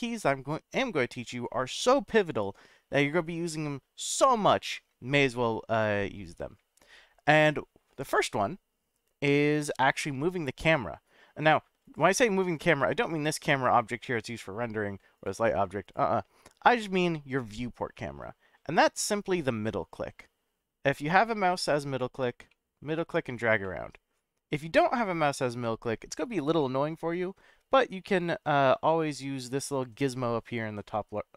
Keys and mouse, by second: 11.8 click, 15.2 click, 15.9-17.6 drag, 17.6-19.2 middle drag, 19.7-20.9 middle drag, 21.3-22.2 middle drag, 22.5-23.4 middle drag, 23.6-26.0 middle drag, 26.6-27.1 middle drag, 28.2-29.5 drag, 30.6-31.3 drag.